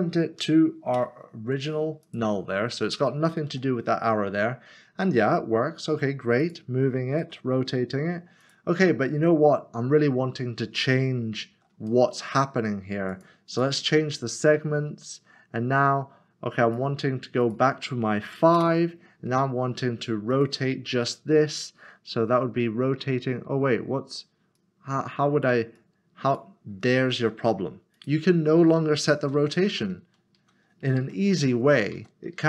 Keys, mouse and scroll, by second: 0.9 ctrl+p, 3.5 g, 6.4 click, 7.4 r, 8.4 click, 12.1 middle click, 13.1 click, 13.5 double click, 15.2 click, 17.4 click, 18.4 typing, 18.6 Return, 20.3 click, 24.6 click, 27.9 click, 29.3 ctrl+z.